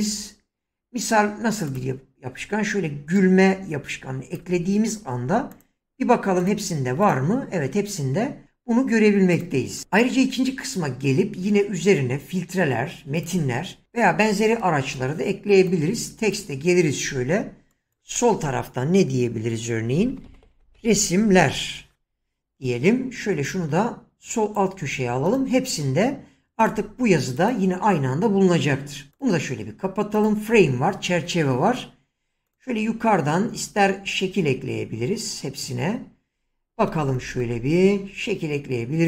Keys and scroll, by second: 19.9-21.9 typing.